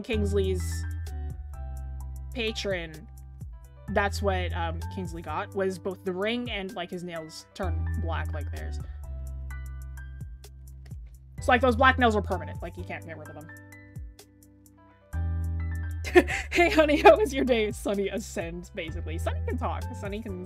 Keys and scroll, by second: 10.5-11.5 scroll down 1.